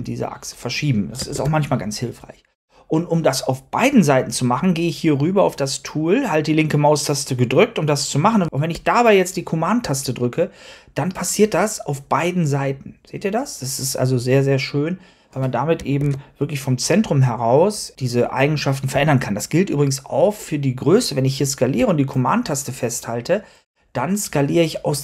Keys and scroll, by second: 1.2 super+z, 16.4 super+z.